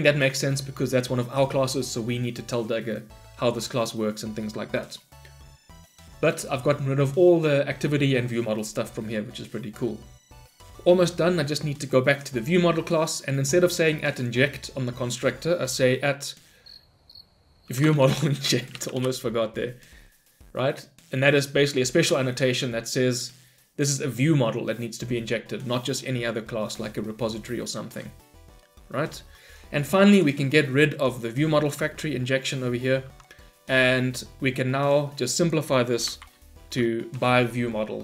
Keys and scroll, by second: 19.0 Return, 32.3 ctrl+y.